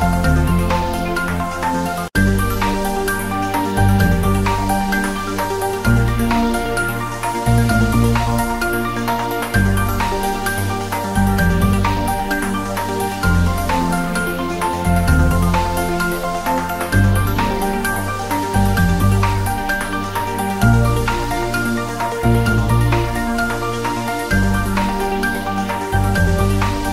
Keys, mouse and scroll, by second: 0.1 drag, 1.5 g, 1.9 y, 2.2 scroll down 1, 2.7 a, 3.0-3.3 drag, 4.5-5.3 typing, 5.7 click, 5.8 scroll up 1, 6.6-6.9 click, 7.0-7.6 scroll up 1, 7.7 g, 7.8 Right, 9.9-10.3 scroll down 1, 10.7 click, 11.2 g, 11.4 drag, 12.7 ctrl+z, 13.0-13.5 scroll up 1, 13.5 click, 13.7-14.0 scroll up 1, 14.2 click, 14.5 Tab, 16.4 Tab, 17.5 Tab, 17.8 scroll up 1, 18.0 scroll down 1, 18.3 click, 19.2 scroll up 1, 19.6-19.9 click, 20.2-21.5 typing, 22.6-24.0 typing, 22.9-23.3 scroll up 1, 25.1-26.0 typing.